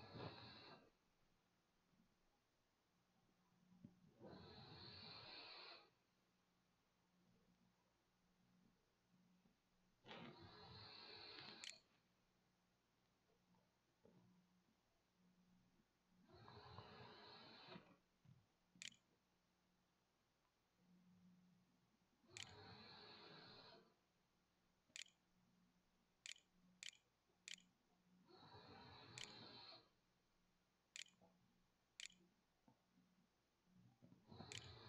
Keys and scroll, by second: 10.4-13.9 typing, 17.1-27.0 typing, 28.1-34.8 typing.